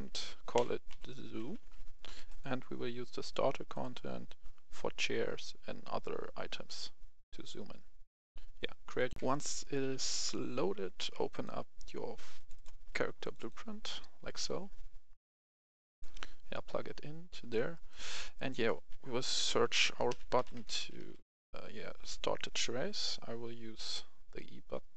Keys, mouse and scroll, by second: 0.5-1.5 typing, 2.2-4.7 drag, 9.2 F10, 11.3-17.0 drag, 17.3 right click, 19.2-21.0 typing, 20.7 right click, 22.2-24.9 scroll up 1.